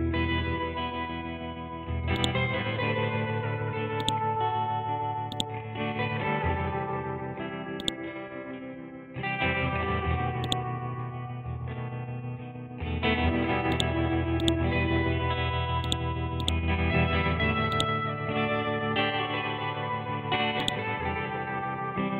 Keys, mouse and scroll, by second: 5.3-6.6 drag, 6.6-7.1 scroll up 1, 7.8 click, 8.4 scroll down 1, 10.4-13.7 drag, 18.3-18.9 scroll down 1, 18.9 scroll up 1, 20.6-22.1 drag.